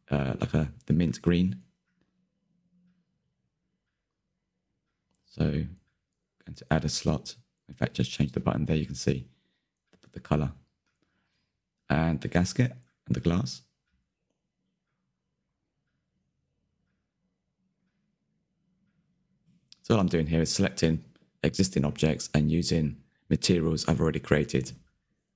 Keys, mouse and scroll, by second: 0.7 t, 1.0 drag, 1.2 Tab, 2.2 click, 2.4 click, 4.6 click, 5.1-5.9 scroll up 3, 6.2-8.2 drag, 8.2-8.6 shift+middle drag, 8.7-10.5 middle drag, 10.5 scroll down 9, 10.7-12.0 shift+middle drag, 12.0 scroll up 7, 12.3 middle click, 12.7 click, 12.9 scroll down 1, 13.7 click, 14.0-14.3 scroll down 2, 14.4 middle click, 14.8 click, 15.4-15.8 drag, 15.8 middle drag, 16.0 scroll up 1, 16.2 shift+middle click, 16.5 click, 18.4 click, 18.7 scroll down 1, 19.6 drag, 20.3 click, 20.8 shift+click, 21.0 shift+click, 21.2 shift+click, 21.6 shift+click, 22.5 click, 22.9 scroll up 3, 23.0 shift+middle click, 23.8 click, 24.7 scroll down 4, 25.0 shift+middle click.